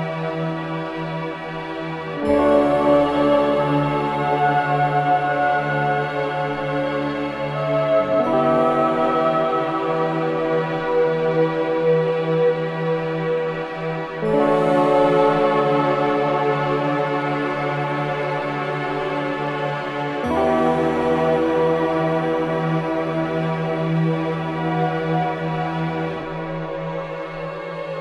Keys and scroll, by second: 6.1 4, 8.0 4, 23.3 2.